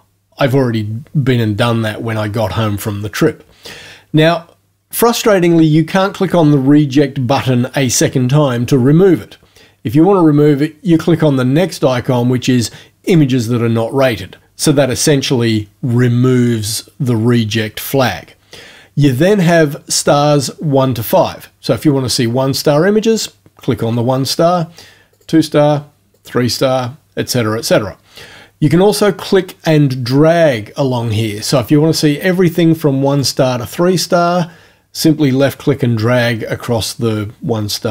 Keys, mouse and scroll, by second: 13.1 click, 23.1 click, 25.1 click, 26.2 click, 31.6-33.4 drag.